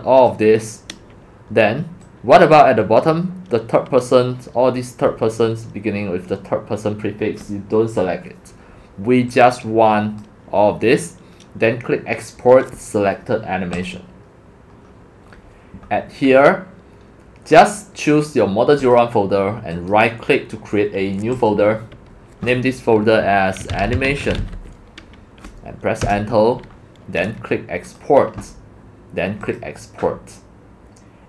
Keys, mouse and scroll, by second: 2.0-2.6 drag, 9.3-10.2 drag, 10.2-11.8 drag, 13.7 click, 15.1 click, 15.5 click, 18.8 click, 19.1 click, 19.7 click, 19.9-21.5 right drag, 21.5-23.6 drag, 23.4-24.9 typing, 26.0 Return, 26.0 Return, 27.9 click, 29.4 click.